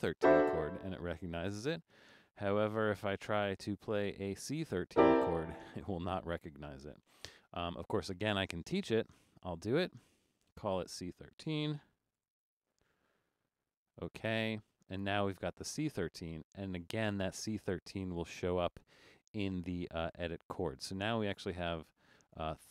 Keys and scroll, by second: 11.9-13.7 typing.